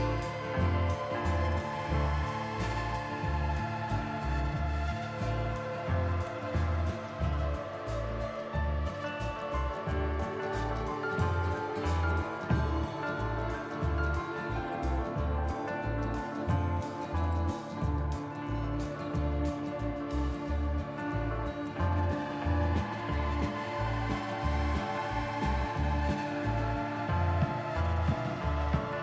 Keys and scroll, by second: 3.3 n, 18.6 s, 27.3 KP_Divide, 28.7 Tab.